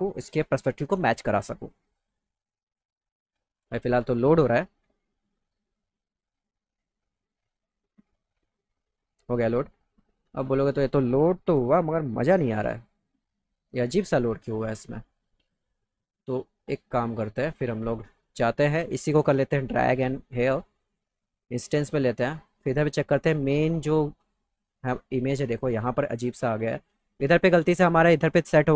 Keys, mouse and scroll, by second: 8.4 click, 15.6 click, 19.3 click, 20.4 middle click, 21.3 click, 27.3 click.